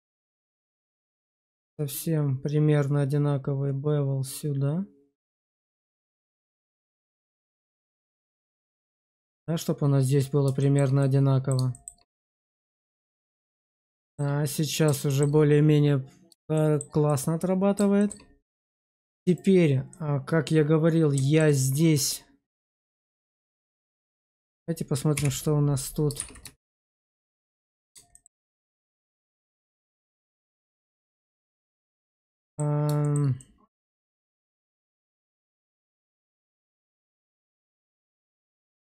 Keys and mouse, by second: 7.8 shift+click, 8.4 shift+middle drag, 8.8-9.3 middle drag, 10.5 shift+middle drag, 10.9-11.4 middle drag, 11.6 shift+middle drag, 12.4 middle drag, 12.9 shift+middle drag, 13.2-13.7 middle drag, 13.9 shift+middle drag, 14.3-14.7 middle drag, 15.0 shift+middle drag, 16.4 shift+middle drag, 16.9-17.7 middle drag, 17.9 shift+middle drag, 18.6 middle click, 19.2 click, 19.8-21.3 middle drag, 23.1 shift+z, 25.0 /, 26.1 shift+z, 26.4 shift+drag, 27.3-27.8 middle drag, 28.0 shift+middle drag, 28.4-30.3 middle drag, 30.5 Tab, 30.9 shift+middle click, 31.4-32.5 middle drag, 32.9 shift+middle click, 33.3 middle click, 33.8 shift+z, 34.2 shift+middle click, 34.6-35.9 middle drag, 36.1 shift+middle click, 36.7 middle click.